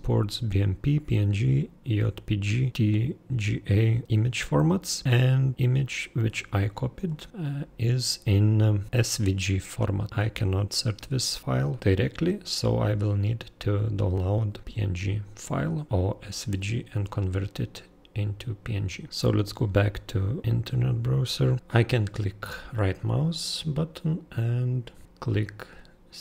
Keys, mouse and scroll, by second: 5.0 super+click, 5.5 super+click, 6.2 super+click, 7.0 super+click, 10.0 super+click, 18.7 super+click, 21.1 super+click, 23.2 super+click.